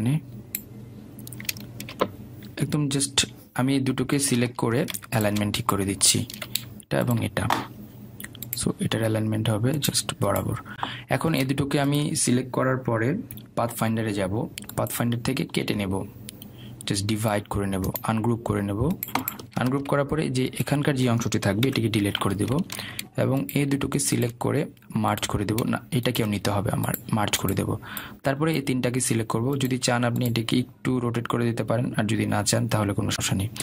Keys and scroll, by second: 4.6 Right, 8.2 Right, 23.6 Delete.